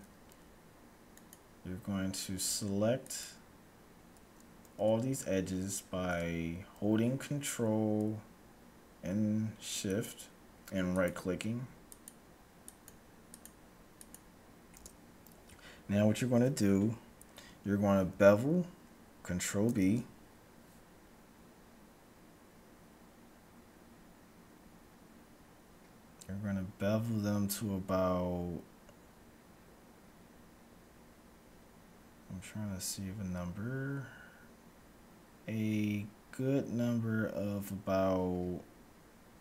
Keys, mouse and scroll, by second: 1.0-2.9 right drag, 3.0-4.7 right drag, 9.9-15.9 right drag, 19.7 ctrl+b.